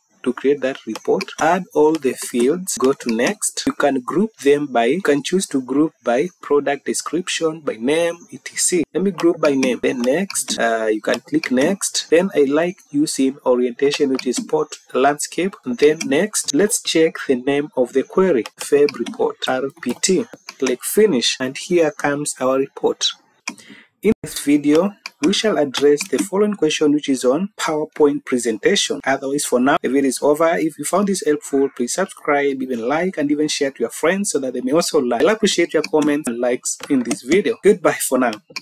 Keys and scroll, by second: 19.4 typing, 26.0 Down, 27.9 Down, 29.7 Up, 32.6 Up.